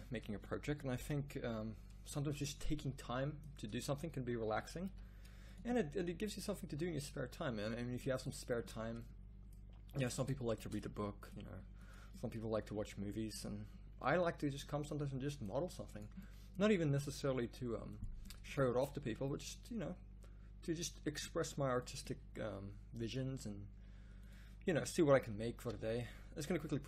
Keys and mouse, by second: 0.6 r, 4.4 g, 8.5 Tab, 12.7 g, 16.9 g, 18.7 Tab, 25.6 s.